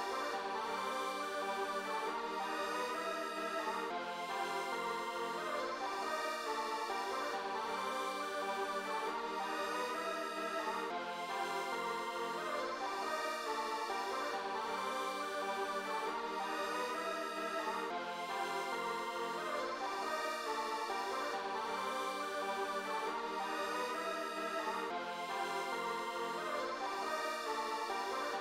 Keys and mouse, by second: 5.6-8.2 drag, 9.4-11.8 drag, 21.4 click, 23.8 click, 25.0 click, 27.3 click.